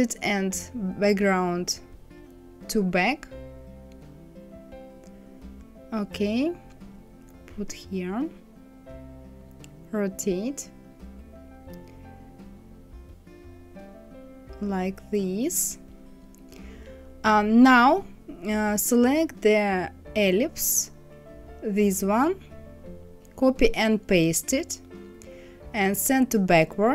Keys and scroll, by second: 23.1 ctrl+c, 23.7 ctrl+f, 26.7 Right.